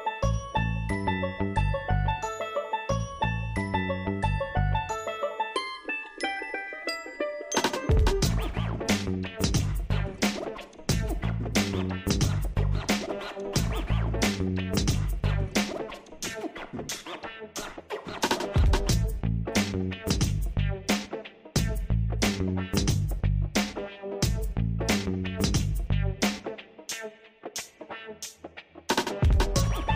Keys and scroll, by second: 9.0 ctrl+t.